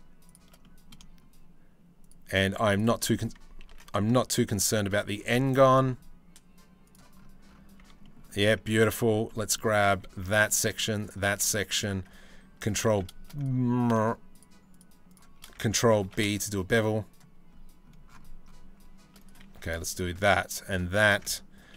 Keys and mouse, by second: 0.2 click, 2.1 z, 2.3 click, 3.2 ctrl+z, 4.2 ctrl+b, 7.6 Tab, 8.4 click, 8.8 drag, 9.3 Tab, 9.5 2, 11.1 click, 12.5 ctrl+b, 13.9 click, 14.7 click, 15.7 ctrl+b, 21.4 ctrl+b.